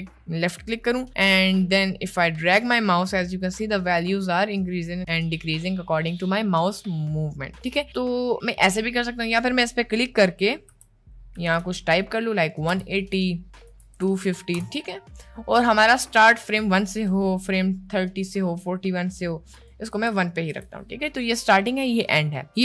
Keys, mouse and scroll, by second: 9.4-12.7 drag, 13.3-14.6 drag, 17.1 click, 19.5-20.6 drag.